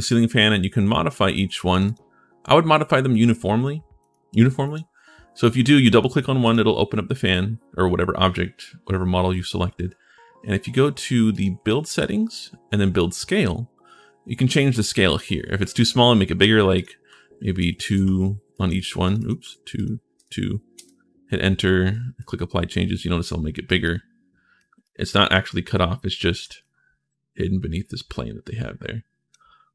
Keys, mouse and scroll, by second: 1.5 click, 1.6 click, 3.8 click, 4.4 click, 11.1 click, 16.5 click, 17.4 2, 17.5 click, 17.7 2, 18.3 click, 18.8 click, 19.0 click, 19.2 2, 19.5 click, 19.9 2, 22.0 click, 23.4 right click, 24.6 shift+right click, 25.7 shift+middle click, 26.4-29.1 drag, 26.4-27.5 right drag.